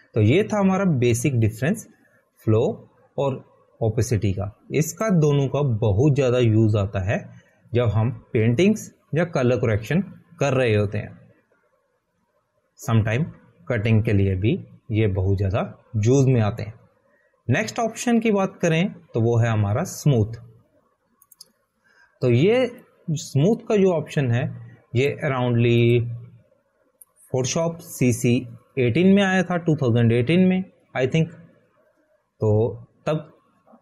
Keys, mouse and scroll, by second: 6.6 click, 23.7 right click, 24.5 right click, 25.3 right click, 29.6 click.